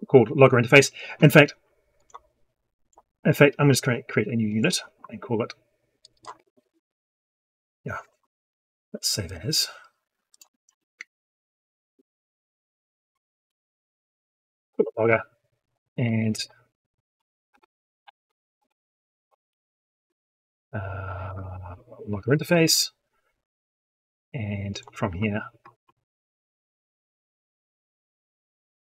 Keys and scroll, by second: 8.0 ctrl+z, 19.7 ctrl+space, 28.8 ctrl+x.